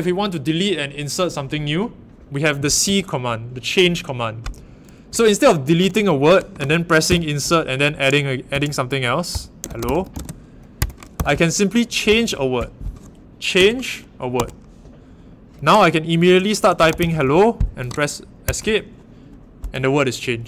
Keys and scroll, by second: 2.8 l, 5.4-7.0 typing, 8.5 Tab, 9.3-12.0 typing, 10.7 Escape, 13.5 c, 14.3 w, 16.5-17.7 typing, 18.4 Escape.